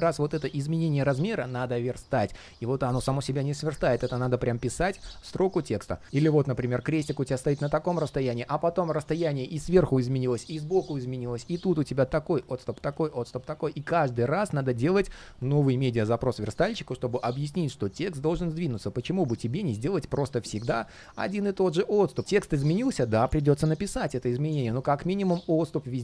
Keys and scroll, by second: 6.0 super+z.